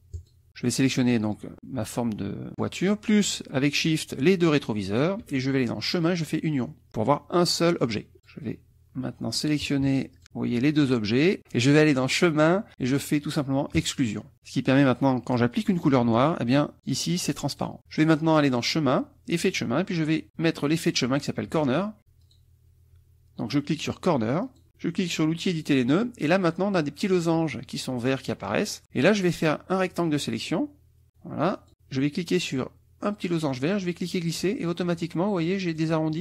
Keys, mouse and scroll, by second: 0.1 click, 0.8 click, 3.8 shift+click, 4.9 shift+click, 5.9 click, 8.2 click, 10.1 shift+click, 13.8 click, 15.7 click, 16.7 click, 17.5 click, 18.6 click, 19.3 click, 20.3 click, 22.3 click, 24.5 click, 25.5 click, 29.9-31.7 drag, 33.8-36.0 drag.